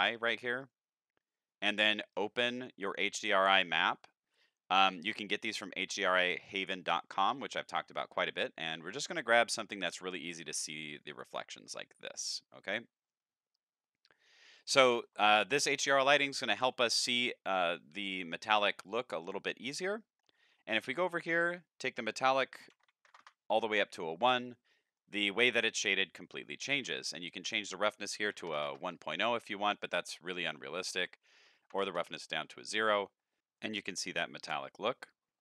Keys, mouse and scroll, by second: 0.6 click, 2.1 click, 4.3 click, 10.9 click, 11.1 click, 14.6-15.0 shift+middle drag, 16.2 shift+middle click, 17.5-18.2 middle drag, 18.4 shift+middle drag, 18.9 middle drag, 19.6 scroll up 1, 19.8 shift+middle click, 21.3 click, 21.8 click, 24.5 middle click, 25.3-26.3 scroll up 2, 27.3 click, 28.3 End, 30.8 click, 35.1 middle click.